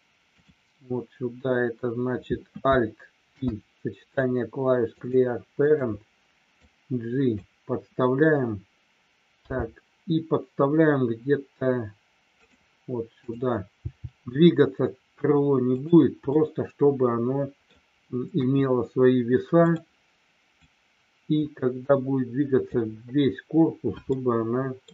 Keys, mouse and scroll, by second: 3.2 alt+p, 6.5 click, 12.3 click, 16.3-17.7 middle drag, 18.3 KP_1, 19.6 click, 20.6-22.7 drag, 24.1 middle click, 24.7 scroll down 1.